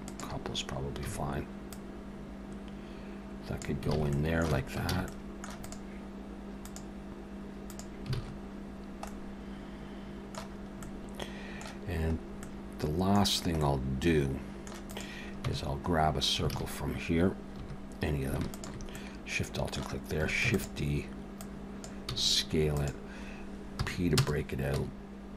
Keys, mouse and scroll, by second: 1.1 a, 1.7 click, 3.9 alt+a, 4.1 middle click, 4.5 Tab, 4.9 alt+a, 5.1 middle click, 5.6 click, 6.6 click, 8.2 alt+a, 8.7-9.1 scroll down 3, 9.1 middle click, 10.6 scroll up 2, 10.8 middle click, 12.2 scroll up 1, 12.4 middle click, 13.2 scroll down 1, 13.6 middle click, 14.2 middle click, 14.9 click, 15.5 Tab, 16.0 scroll up 1, 16.5 alt+a, 17.5 2, 18.5 alt+shift+click, 19.0 middle click, 20.4 shift+d, 21.4 click, 22.1 s, 23.8 p, 24.7 Tab.